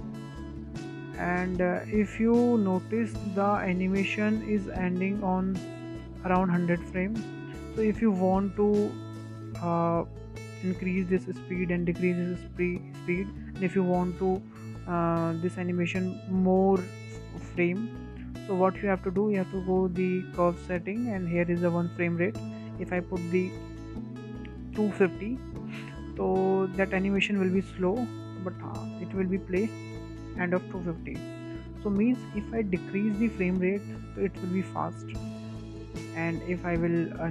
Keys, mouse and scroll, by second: 0.2-1.0 scroll down 3, 1.0 space, 1.7-4.7 drag, 14.6-17.7 drag, 19.6-22.6 shift+middle drag, 23.1-26.2 drag, 27.5 space, 29.3 space, 30.0-33.0 drag, 33.7-35.2 drag, 35.2 space.